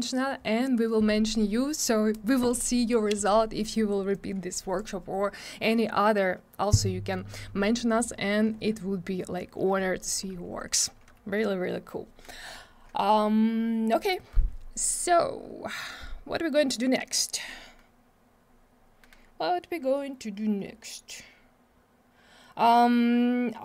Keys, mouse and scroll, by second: 4.1 click, 9.1 scroll up 1.